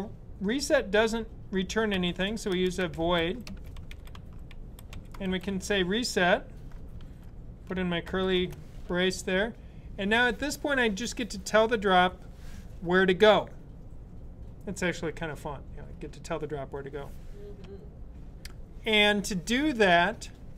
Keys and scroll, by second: 1.5-5.8 typing, 7.9 typing.